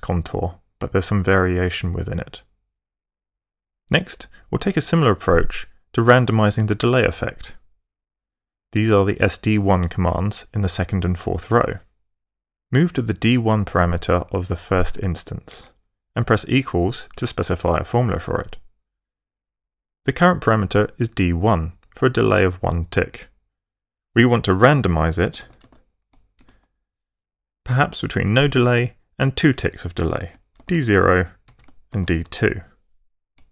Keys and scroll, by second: 14.6 Up, 14.7 Right, 14.9 Up, 15.8 Right, 17.0 =, 24.9-26.7 typing, 30.2-32.1 typing, 33.2-33.5 typing.